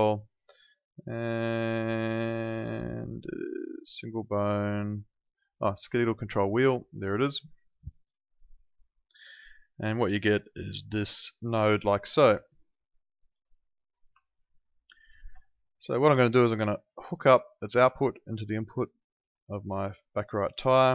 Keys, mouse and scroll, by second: 8.8 click, 12.4 ctrl+click, 13.7 click, 14.3 ctrl+click, 17.0 click.